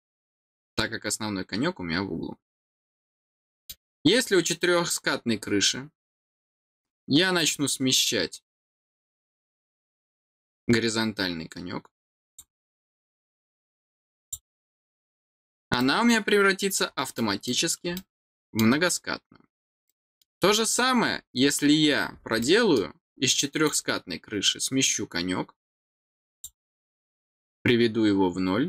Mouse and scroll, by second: 2.5 middle click, 3.3 middle click, 4.2 middle click, 7.3 click, 12.2 click, 14.1 click, 15.7 middle click, 17.1 middle click, 17.9 middle click, 19.8 middle click, 20.4-20.8 scroll down 4, 21.3-22.1 scroll down 8, 22.3 middle click, 23.6 click, 26.2 click.